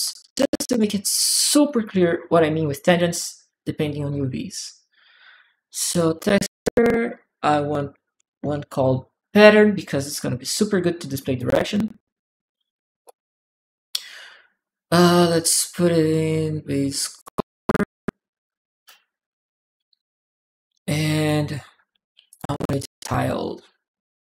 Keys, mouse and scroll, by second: 0.1 alt+right click, 1.2 alt+click, 2.1 alt+click, 2.7 alt+click, 3.9 alt+click, 5.6 alt+t, 5.7 click, 6.9 click, 7.7-8.8 typing, 11.1 click, 12.8-17.0 drag, 20.8 click, 21.9 u, 21.9 u, 22.1 click, 22.1 u, 22.8 click.